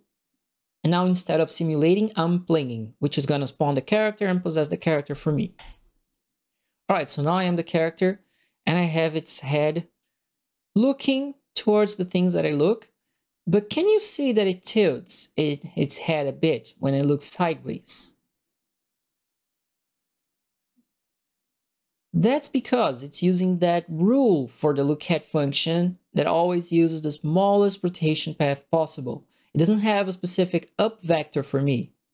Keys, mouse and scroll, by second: 6.8 middle click, 15.6 right click.